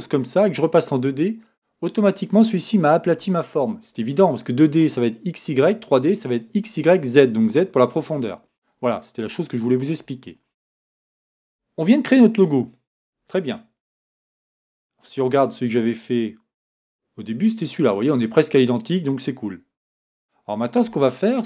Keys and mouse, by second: 11.4 Tab.